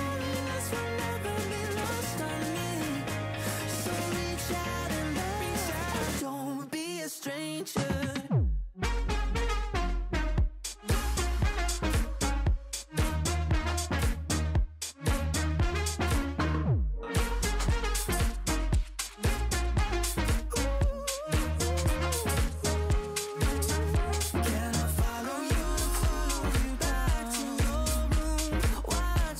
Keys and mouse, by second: 1.0 click, 4.8 click, 5.4 ctrl+[, 5.8 ctrl+], 8.5 click, 10.1 click, 12.7 click, 13.4 alt+shift+click, 14.7 click, 15.6 click, 16.1 click, 16.5 x, 17.2 click, 17.4 [, 17.7 click, 18.1 ], 18.3 click, 19.1 click, 21.0 click, 21.2 shift+click, 22.1 shift+click, 23.3 click, 23.6 click, 24.0 click, 24.3 click, 24.6 click, 24.9 click, 27.4 x, 27.5 click, 28.1 space, 28.5 click, 29.0 click, 29.2 x.